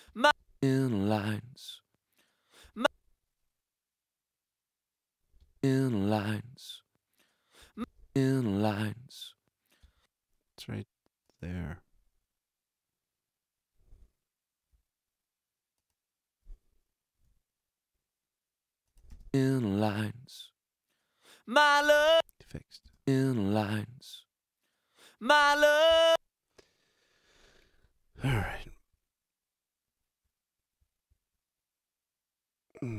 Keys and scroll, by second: 0.0 space, 2.6 space, 5.4 space, 7.6 space, 9.8 space, 17.2 super+s, 19.1 space, 27.8 alt+a.